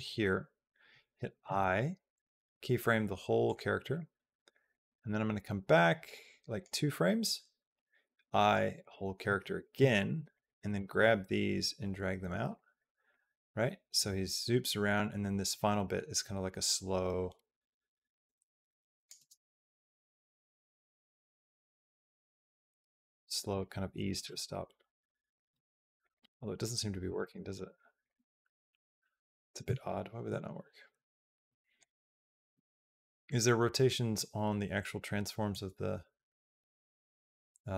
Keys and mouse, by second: 1.2 i, 4.6-6.5 drag, 7.5 i, 10.1 click, 10.6 g, 12.9-18.9 drag, 18.9 space, 21.6 space, 22.5 click, 22.7 g, 23.8 click, 24.0 space, 25.4 space, 25.8 click, 25.8 space, 26.1 space, 26.9 space, 27.0 click, 28.3 ctrl+z, 28.8 ctrl+z, 29.6 ctrl+z, 30.2 ctrl+z, 30.8 ctrl+z, 31.7-34.0 drag, 35.3-37.7 drag.